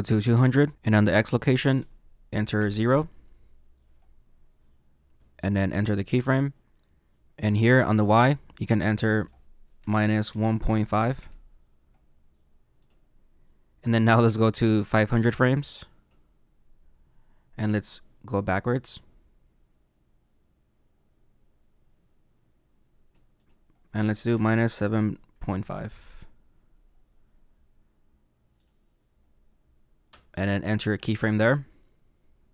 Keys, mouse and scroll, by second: 0.6 click, 2.8 click, 6.0 click, 7.2 ctrl+z, 11.1 click, 12.7 click, 15.5 click, 18.4 click, 25.9 click, 28.5 click.